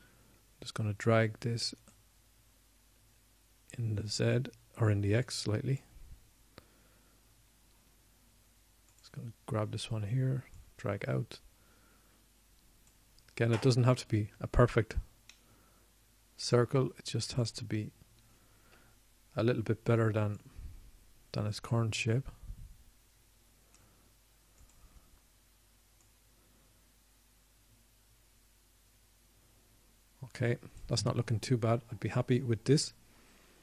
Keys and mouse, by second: 0.3-1.4 drag, 1.4 KP_1, 5.5-7.0 drag, 10.0 middle click, 12.5-14.1 middle drag, 16.4-17.9 middle drag, 18.8 middle click, 22.0 KP_1, 28.2-31.8 drag.